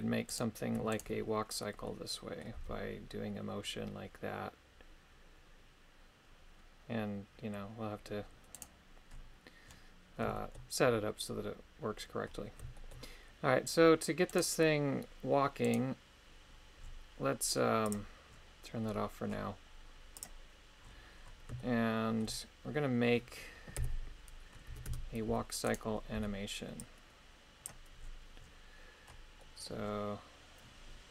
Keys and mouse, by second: 0.3 right click, 0.9 shift+right click, 1.9 middle click, 2.6 g, 8.5 right click, 10.4 shift+middle click, 14.3 right click, 15.7 right click, 17.9 click, 20.1 click, 21.6 shift+middle click, 23.8-26.1 typing, 29.4 middle click.